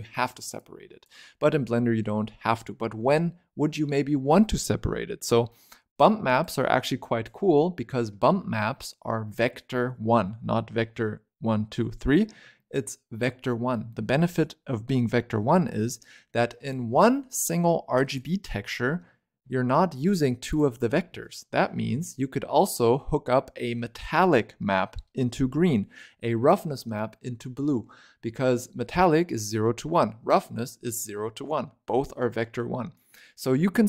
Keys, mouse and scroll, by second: 0.5 click, 4.9-5.9 scroll down 2, 5.9 click, 6.9 click, 8.4-10.1 scroll up 3, 10.1-11.1 scroll up 1, 11.1-13.1 scroll up 2, 15.2-16.1 scroll down 7, 16.6 click, 17.9 click, 19.0-19.8 scroll up 2, 19.8 click, 21.1-21.6 scroll down 6, 21.6-24.7 middle drag.